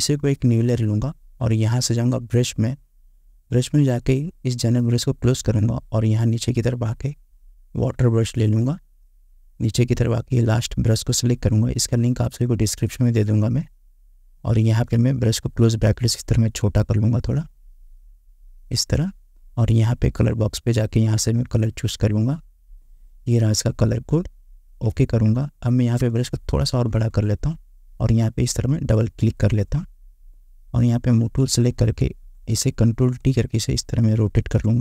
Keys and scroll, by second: 15.7 [, 26.8 ], 32.2 ctrl+t.